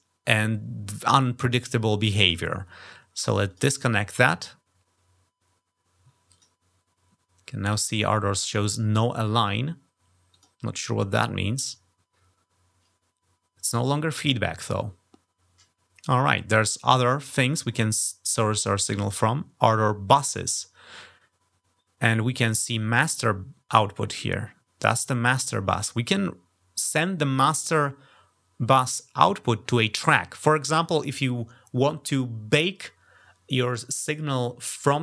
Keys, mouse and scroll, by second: 3.2 click, 6.1 click, 10.1 click, 18.9 click.